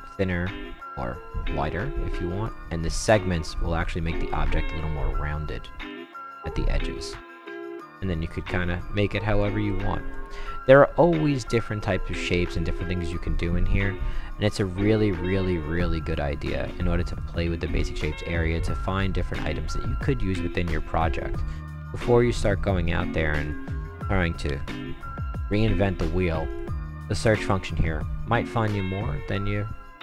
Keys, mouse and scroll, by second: 3.1-6.5 drag, 7.3 right click, 7.8 middle click, 7.8 scroll up 1, 8.3 scroll down 1, 8.8-9.4 right drag, 9.7-10.1 right drag, 10.7 middle click, 11.2 middle click, 13.0 middle click, 14.1-14.6 right drag, 14.8 middle click, 17.1 click, 22.0 click, 22.5-23.4 right drag, 23.5 right click, 26.5 click.